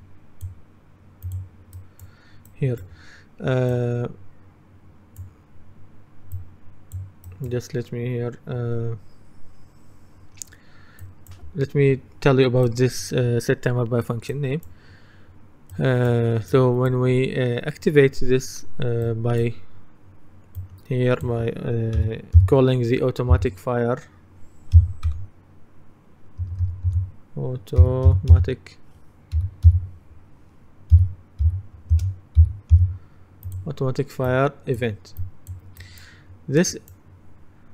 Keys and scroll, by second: 22.2-22.9 typing, 24.8 typing, 26.5 BackSpace, 27.6-28.9 typing, 32.0-32.5 typing.